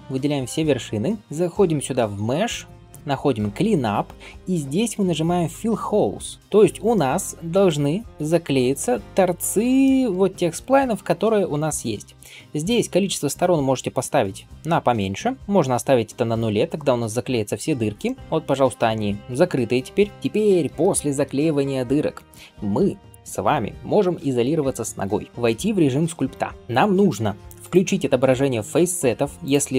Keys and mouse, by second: 1.4-20.1 drag, 17.3 middle click, 20.1-29.7 right drag, 22.3 click, 25.3 KP_Divide, 25.6-29.7 drag, 25.6-29.7 middle drag.